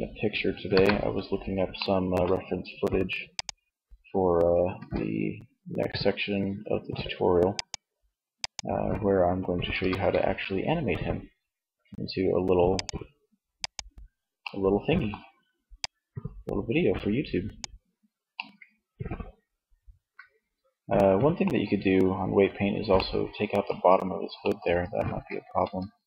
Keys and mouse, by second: 4.2 r, 9.0 r, 12.3 click, 15.0-16.7 middle drag, 18.4-20.2 middle drag, 22.2-23.7 middle drag, 25.8 right click.